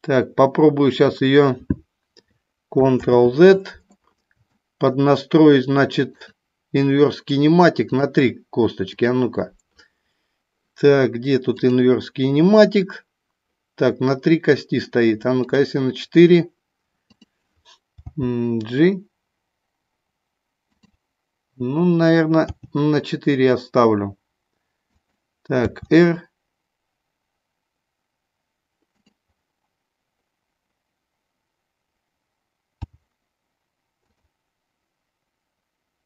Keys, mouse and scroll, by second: 3.0 ctrl+z, 4.4 shift+middle click, 6.2 click, 8.9-10.0 drag, 15.4 click, 16.9 click, 17.9 g, 20.8 click, 22.5 g, 24.9 click, 25.7 r, 28.9 click, 32.8 g, 34.0 click.